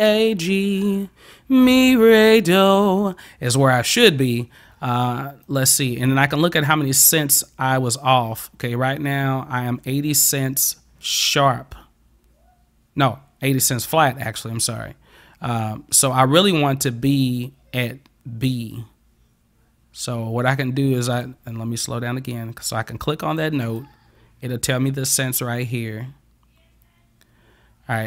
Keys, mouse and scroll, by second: 5.5 click, 5.7 click, 17.8-21.3 drag, 23.3 click, 23.7 click.